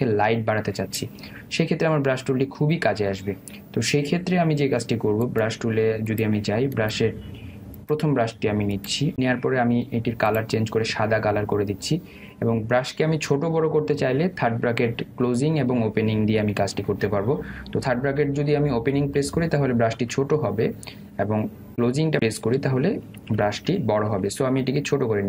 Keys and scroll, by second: 22.0 [, 23.5 ].